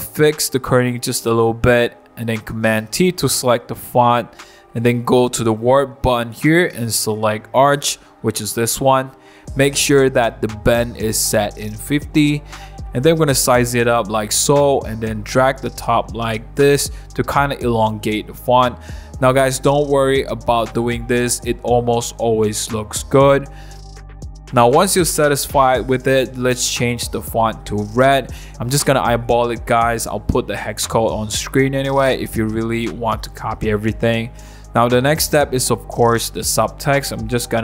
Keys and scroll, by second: 1.0-2.0 typing, 4.4 super+t, 24.2 Return, 24.4 super+0, 24.4 super+-, 36.2 super+t.